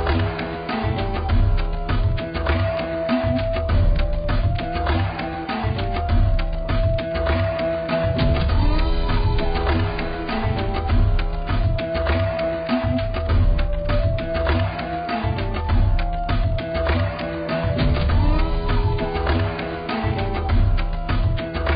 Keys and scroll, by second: 20.3 z.